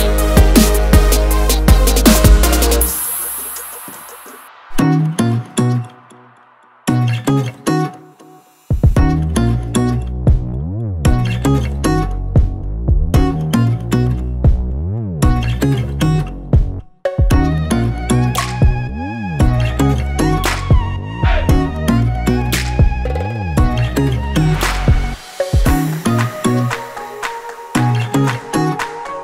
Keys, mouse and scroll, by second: 0.8 click, 2.7 ctrl+c, 3.7 click, 5.8 ctrl+v, 6.9 click, 7.4 scroll down 1, 7.7-8.0 scroll up 1, 8.0 click, 9.2 click, 10.1 click, 12.0 click, 12.8 click, 14.0 click, 15.5 click, 16.1 double click, 17.0 click, 19.9 click, 21.2 click, 22.1 1, 22.9 BackSpace, 23.3 2, 25.4 click, 26.8 click, 28.2 click, 29.0 click.